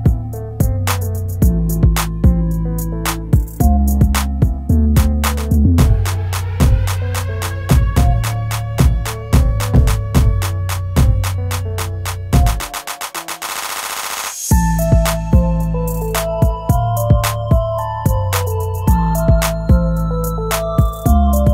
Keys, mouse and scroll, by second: 11.4 shift+F4.